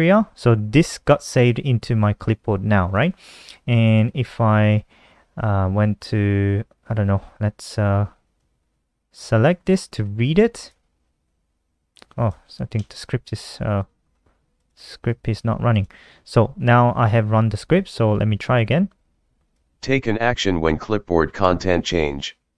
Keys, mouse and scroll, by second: 0.4 click, 2.4 click, 3.3 click, 7.9 ctrl+click, 11.7 click, 12.3 F5, 14.1 click, 15.0-15.7 typing, 17.7 ctrl+click.